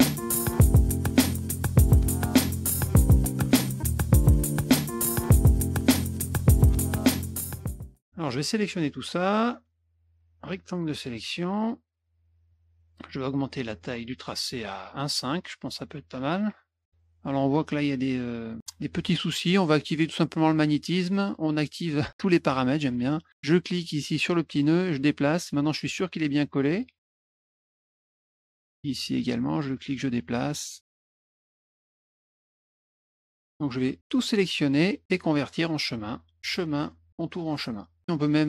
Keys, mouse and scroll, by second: 0.2 shift+F2, 1.1 middle click, 1.2 click, 1.5 click, 2.1 click, 2.3 click, 2.5 Return, 2.8 click, 3.0 click, 3.5 click, 3.7 click, 3.9 middle click, 4.1 middle click, 4.3 click, 4.5 click, 5.0 click, 5.2 drag, 5.6 click, 5.8 drag, 6.2 click, 6.5 click, 7.1 click, 7.4 click, 7.8 middle click, 8.0 middle click, 9.4-11.7 drag, 13.8 right click, 15.0 click, 18.4 middle click, 20.0 click, 20.5 click, 24.0 click, 24.6 click, 26.8 click, 27.5 middle click, 27.8 middle click, 28.4 middle click, 29.4 click, 30.4 click, 30.7 middle click, 31.8 middle click, 32.3 click, 33.0 F1, 33.4 middle click, 34.1-35.5 drag, 36.4 click, 37.6 click.